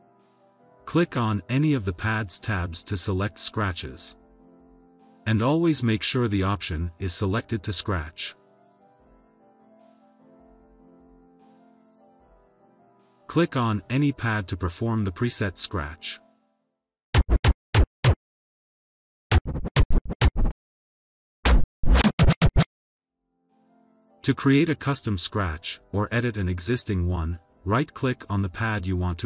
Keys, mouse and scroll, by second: 1.3 click, 4.7 click, 11.4-14.4 drag, 17.1 click, 19.2 click, 21.3 click, 24.2 drag.